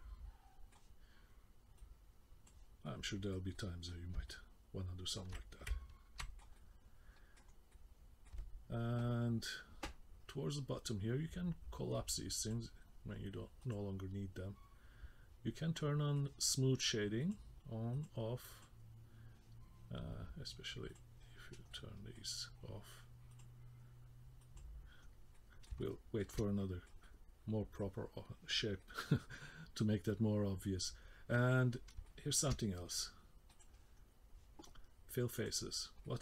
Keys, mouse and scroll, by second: 1.8 click, 2.8 middle click, 3.5 middle click, 4.3 alt+middle click, 5.6 middle click, 6.5 middle click, 7.5 scroll down 1, 7.7 middle click, 9.3-9.9 scroll down 4, 9.9-12.6 scroll down 5, 12.6 click, 13.8 click, 15.8 middle click, 17.4 click, 18.1 click, 18.7 click, 20.9 click, 21.4-21.7 scroll up 2, 21.7 middle click, 23.5 click, 24.6 click, 25.1 scroll down 1, 25.3 middle click, 25.8 shift+middle click, 26.3 shift+middle click, 27.0 middle click, 28.8 middle click, 31.8 scroll up 2, 32.0 shift+middle click, 33.5 click, 34.0-34.4 scroll down 1, 35.5 click.